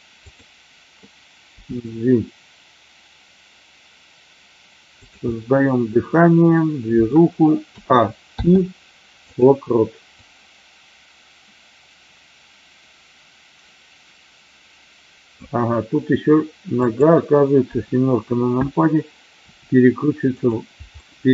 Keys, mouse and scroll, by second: 0.2 click, 1.4 g, 5.3-7.1 middle drag, 7.1 scroll down 1, 7.7 a, 8.2 i, 10.1-15.4 drag, 16.8 click, 19.4 r, 20.3 click, 20.9 middle click.